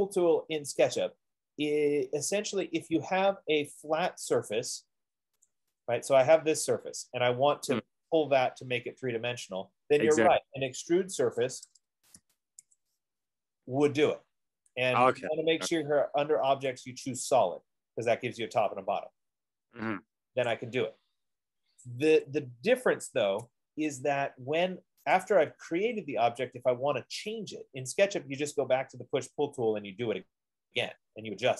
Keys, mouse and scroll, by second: 3.2 click, 4.6 click, 5.8 click, 6.7 click, 8.0 click, 10.7 e, 11.7-14.0 typing, 13.7 Return, 16.9 click, 17.9 F15, 20.8 click, 22.3 Escape, 25.5 click, 28.3 click, 30.7 click.